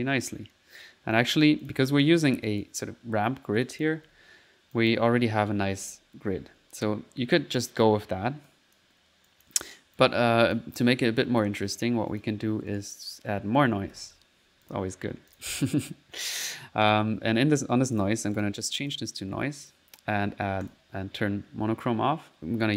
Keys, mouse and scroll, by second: 0.0 typing, 1.2-3.0 drag, 3.7 click, 4.1 1, 4.8 click, 5.1-6.5 typing, 7.4 click, 8.5 click, 9.3 click, 10.0 click, 10.5 click, 10.7 typing, 11.0 middle click, 11.3 click, 12.1 click, 12.7 right click, 13.2 click, 13.4-14.6 typing, 14.7 click, 15.4 click, 16.9 click, 18.0 click, 18.4 click, 18.9 click, 19.7 click, 20.1 click, 20.7 click.